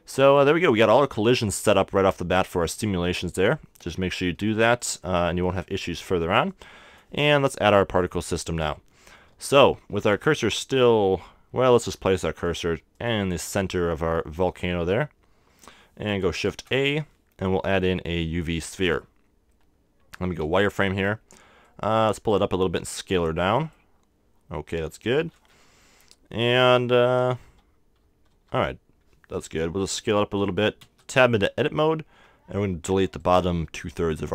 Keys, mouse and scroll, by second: 2.3-4.1 drag, 4.1-5.6 middle drag, 6.5-8.3 drag, 8.3 middle click, 9.3 KP_1, 10.4 KP_3, 11.1 KP_7, 12.5-15.2 drag, 13.6 KP_3, 16.4 shift+a, 20.4 z, 21.6-23.5 drag, 22.6 s, 23.6-25.3 drag, 23.7-25.3 middle drag, 26.0-28.3 typing, 29.3-29.8 scroll down 1, 30.2 s, 30.6 click, 30.8 Tab, 32.5 a, 32.9 b.